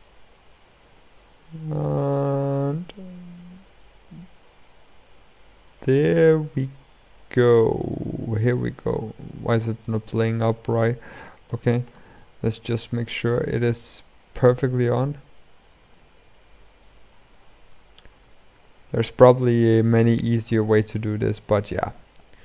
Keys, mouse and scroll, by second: 2.8 r, 12.1 scroll up 1, 12.3-14.0 middle drag, 14.0 r, 17.5-19.9 middle drag, 19.9 r, 21.9 KP_7.